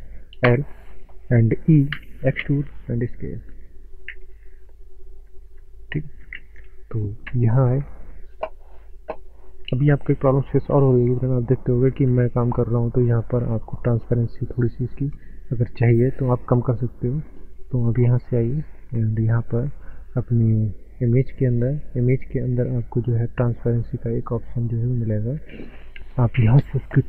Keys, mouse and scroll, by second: 0.4 l, 2.0-2.4 typing, 3.4 right click, 4.1 s, 5.4 click, 5.8 shift+middle click, 7.3 ctrl+space, 8.0 shift+middle click, 8.6 shift+middle click, 9.3 shift+middle click, 10.5 ctrl+space, 10.6 shift+middle click, 12.1 Tab, 17.3 click, 20.2 scroll down 1, 21.4 scroll down 5, 21.4 click, 21.9-22.4 scroll down 2, 24.5 click.